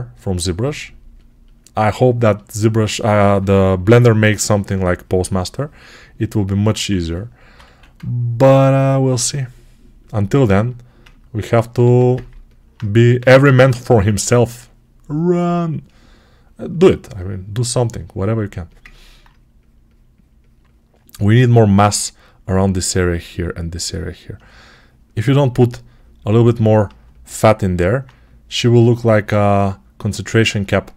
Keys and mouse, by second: 3.3 p, 3.7 [, 3.9 [, 7.5 1, 9.1-30.9 shift+right drag, 11.7 2.